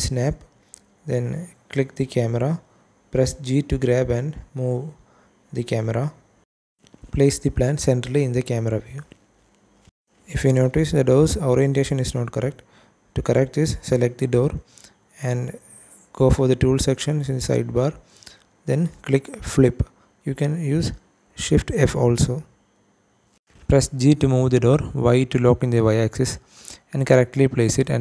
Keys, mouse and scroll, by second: 0.4 scroll down 2, 0.8 shift+middle click, 1.1-2.2 scroll up 1, 2.2 g, 7.0 click, 7.4-8.2 scroll up 2, 8.5 shift+middle click, 9.4-9.8 scroll up 1, 10.0 scroll down 1, 10.5 shift+middle click, 11.7 click, 19.6 click, 20.6-20.9 scroll up 2, 21.2 shift+middle click, 21.8 g, 23.1 y, 25.8 click, 26.9 click, 27.2 scroll down 1, 27.8 shift+middle click.